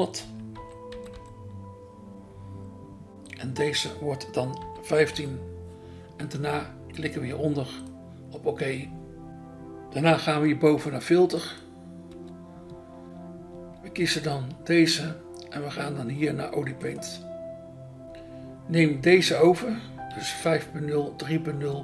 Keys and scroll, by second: 0.5 -, 0.9 0, 5.1 5, 12.1 BackSpace, 20.0 BackSpace.